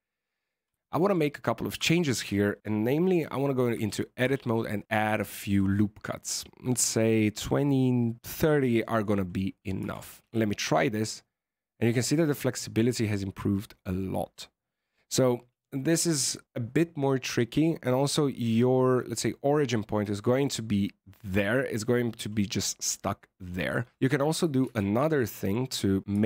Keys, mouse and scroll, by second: 0.7 alt+a, 0.9 click, 1.7 Tab, 4.1 ctrl+r, 9.7 Tab, 10.2 alt+a, 17.5-20.6 scroll up 4, 23.7-24.3 scroll down 3, 23.9 Tab, 24.5 alt+a, 25.3 click, 26.0 Tab.